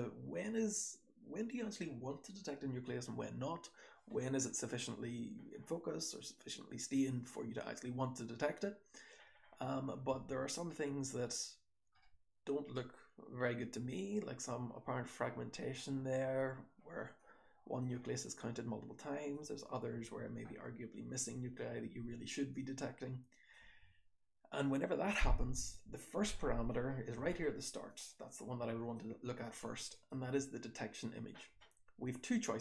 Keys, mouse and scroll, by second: 4.4-9.8 scroll up 1, 9.8-11.0 scroll up 1, 10.0 h, 11.0 scroll up 1, 11.0 h, 11.9 h, 12.5 scroll up 1, 13.5 h, 14.8 scroll up 1, 14.8 h, 15.6-17.2 scroll down 1, 17.2-17.7 drag, 18.4-19.2 drag, 19.2 scroll down 1, 19.3 h, 19.9 h, 20.4-21.2 scroll down 1, 21.2-21.9 scroll down 1, 21.2 h, 21.9-23.4 scroll down 1, 21.9 h, 22.5-23.4 drag, 23.4-25.8 scroll down 1, 25.8-27.8 scroll down 1.